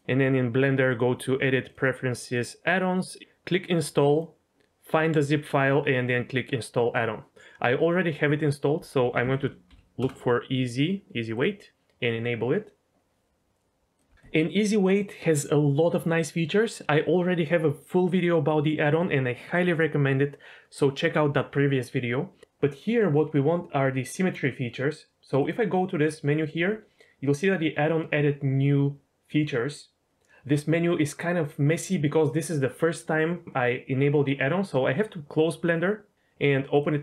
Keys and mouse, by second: 0.9-1.8 drag, 25.6-32.3 drag.